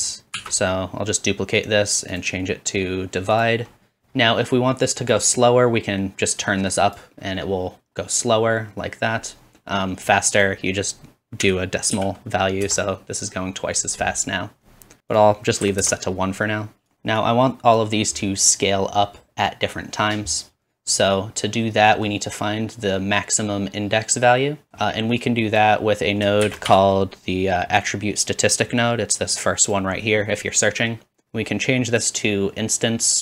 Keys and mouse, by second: 0.2-2.1 shift+drag, 0.4 shift+d, 2.2-21.0 drag, 4.0 ctrl+z, 15.1 ctrl+z, 26.4 shift+a, 30.7 typing, 30.8-31.9 middle drag, 32.2-33.2 drag.